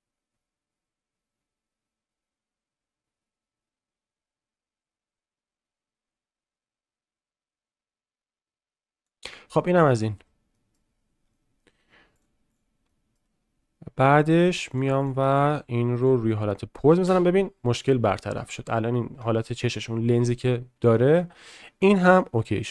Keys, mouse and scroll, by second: 9.5 click, 10.5 middle click, 11.3 shift+click, 12.2 click, 12.8-13.1 shift+middle drag, 15.0 click, 16.0 click, 17.0 space, 18.4-18.7 middle drag, 19.2 shift+middle click, 20.9 middle click, 22.2-22.5 middle drag.